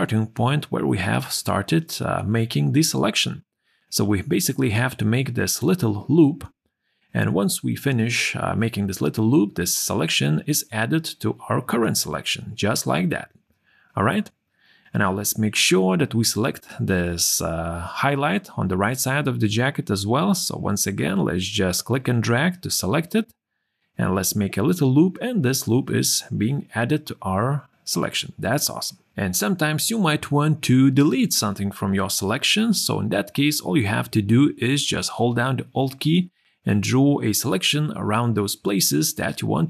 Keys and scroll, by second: 9.6 q, 12.7 q, 26.0 q, 32.4 q, 36.2 q.